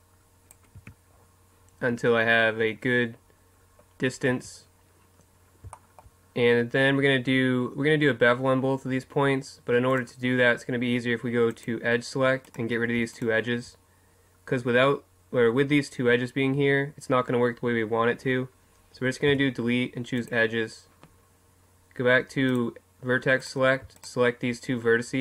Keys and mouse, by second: 0.8 Tab, 4.0 middle click, 4.4 Tab, 9.9-11.7 right drag, 11.5-13.4 drag, 12.5-19.3 right drag, 19.3 Delete, 22.5-25.2 drag, 23.4-25.2 middle drag.